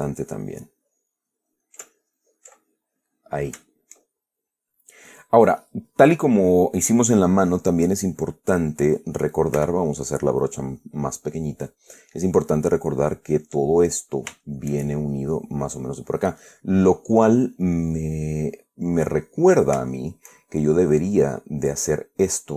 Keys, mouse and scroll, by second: 2.9-3.4 ctrl+middle drag, 3.5 ctrl+middle click, 4.0 ctrl+shift+right click, 4.1-4.9 shift+middle drag, 5.2 middle click, 9.9 f, 11.4 click, 14.1-15.2 middle drag, 15.7 click, 16.8-19.4 middle drag, 19.7-21.2 middle drag.